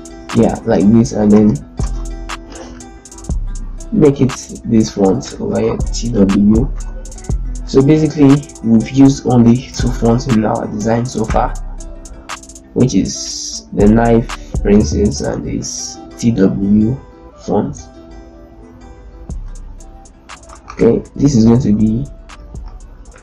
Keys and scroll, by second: 0.0 ctrl+space, 0.5 ctrl+a, 1.1 ctrl+l, 1.5 ctrl+space, 5.5 t, 7.0 BackSpace, 8.0 KP_7, 8.8 BackSpace, 9.3 Return, 17.9 ctrl+l, 20.5 ctrl+a, 20.8 ctrl+l, 21.2 ctrl+space.